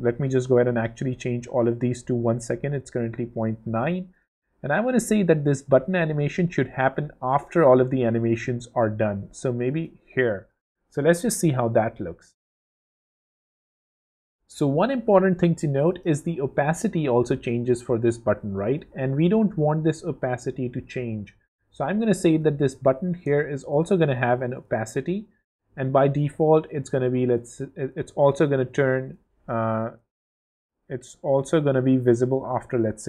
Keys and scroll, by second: 10.7 w, 23.2 0, 29.8 super+z.